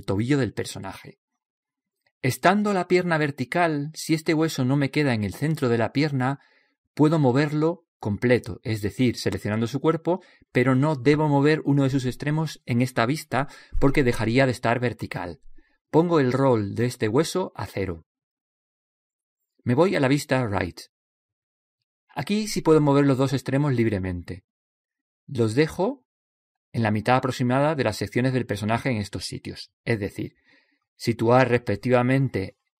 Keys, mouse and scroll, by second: 1.1 click, 2.7-4.2 middle drag, 4.2 click, 5.8 click, 5.8 middle click, 5.8 right click, 7.0 middle click, 7.6 click, 11.1 right click, 12.3 click, 14.2 click, 16.0-18.1 middle drag, 16.0-17.8 scroll up 1, 17.8 scroll up 1, 18.1 click, 21.1 KP_3, 22.5-24.4 middle drag, 24.4 click, 27.4 right click, 28.0-29.1 middle drag, 29.4 click, 29.9 right click, 31.4 click, 31.9 right click, 32.2 right click.